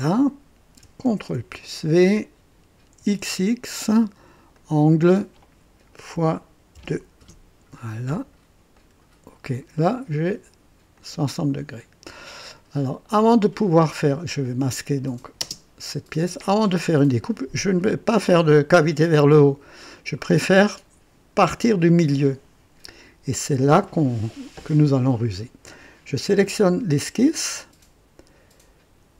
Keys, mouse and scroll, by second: 1.1 ctrl+v, 2.9 x, 3.1 x, 4.5 click, 6.1-6.8 typing, 7.2 Return, 8.7 click, 10.9 click, 12.3-13.5 drag, 14.4 click, 15.4 typing, 15.4 ctrl+space, 16.5 typing, 26.3 click.